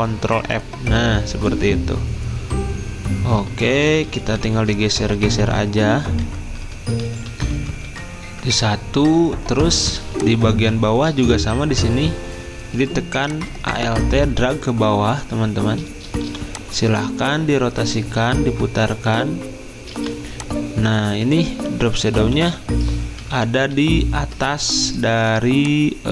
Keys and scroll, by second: 0.3 ctrl+f, 3.8 Up, 4.0 typing, 5.0 Up, 5.2 Up, 5.4 Up, 6.4 typing, 8.2 Up, 10.6 typing, 17.5 r, 23.2 ctrl+], 23.7 ctrl+].